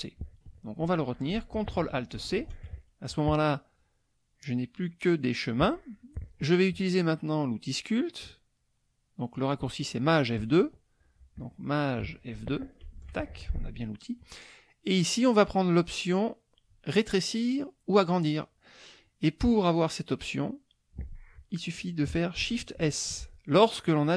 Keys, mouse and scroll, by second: 2.2 ctrl+alt+c, 12.8 shift+F2, 23.3 shift+s.